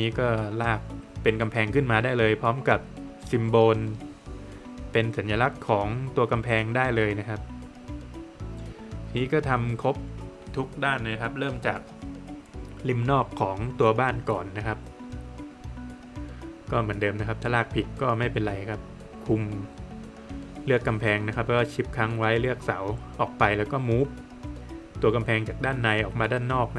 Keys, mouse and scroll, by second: 0.1 middle click, 0.4 scroll down 1, 0.6 middle click, 1.1 scroll down 1, 1.2 middle click, 2.3 middle click, 3.0 middle click, 4.4 click, 6.3 scroll up 1, 7.6 click, 7.8 scroll down 1, 8.0 middle click, 8.5 scroll down 1, 8.6-9.2 scroll up 1, 9.7 click, 11.9 click, 13.2 middle click, 15.1 Escape, 15.3 scroll up 1, 16.8 click, 17.1 scroll down 1, 17.2 middle click, 18.1 middle click, 18.5 scroll down 1, 18.8 middle click, 20.1 click, 22.2 scroll up 1, 23.3 space, 23.7 scroll up 1, 24.6 click, 26.1-26.5 scroll down 1, 26.5 middle click.